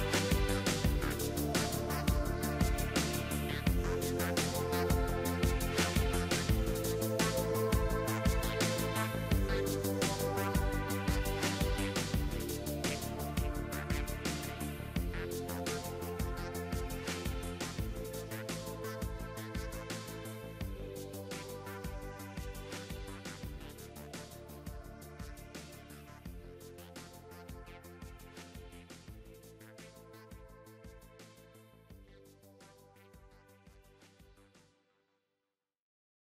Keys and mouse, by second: 1.5 g, 2.5 ctrl+z, 3.1 b, 4.3 g, 5.4 ctrl+s, 9.6-16.1 right drag, 12.7 x, 16.1 ctrl+z, 17.0 ctrl+z, 19.7 KP_3, 20.6 e, 25.6 e, 28.5-36.2 drag, 28.7 g, 30.1 g, 31.5 g, 32.8 g, 34.0 g, 34.9 g.